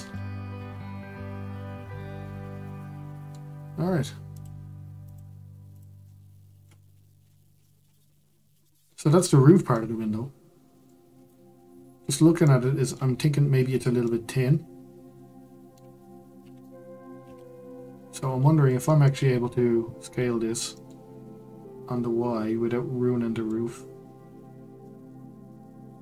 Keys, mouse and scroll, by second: 0.1-4.3 middle drag, 4.3-5.1 drag, 5.7 click, 6.0 middle click, 6.9-7.6 scroll up 1, 7.6-11.1 middle drag, 11.1-12.4 scroll down 7, 12.4 middle click, 13.1-14.0 scroll up 5, 14.0-17.2 middle drag, 17.2 Tab, 18.9-20.0 middle drag, 20.0 s, 24.8-26.0 middle drag.